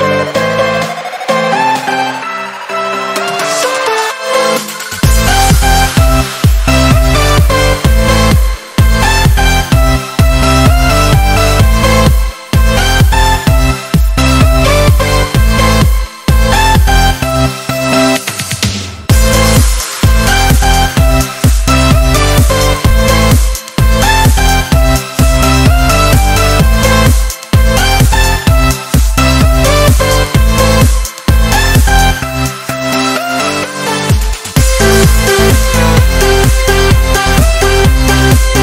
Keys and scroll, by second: 2.4 ctrl+z, 2.6 ctrl+z, 6.9 ctrl+-, 7.8 ctrl+z, 10.9 ctrl+-, 19.8 ctrl+z.